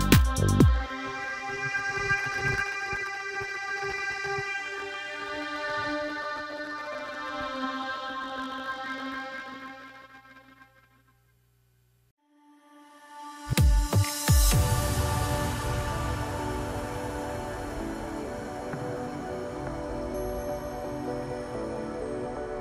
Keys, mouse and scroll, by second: 2.9 middle click, 3.5-4.3 scroll up 1, 4.3 click, 4.8 shift+click, 6.4 KP_3, 7.6 scroll down 2, 8.2 e, 9.5-10.6 middle drag, 10.6-11.2 scroll down 5, 11.2 scroll up 3, 11.4-12.3 scroll down 3, 12.3 KP_Divide, 13.7 middle click, 14.4 Tab, 14.9 middle click, 15.8 KP_1, 16.9 g, 19.0-20.7 middle drag, 20.7-21.3 scroll up 1, 21.3 scroll down 2, 22.0 s.